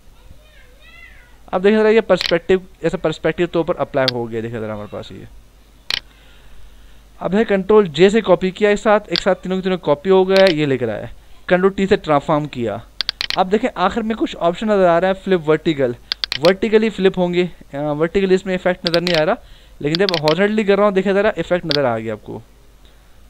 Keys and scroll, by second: 2.7 Return, 3.8 v, 7.9 ctrl+j, 11.5 ctrl+t.